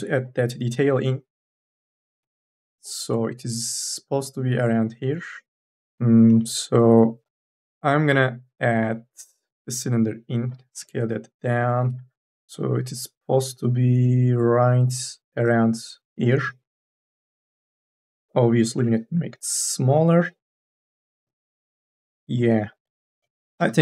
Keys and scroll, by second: 0.9 3, 1.9 3, 2.1 e, 10.9-12.5 typing, 18.8 t, 19.8 e, 21.5 ctrl+z.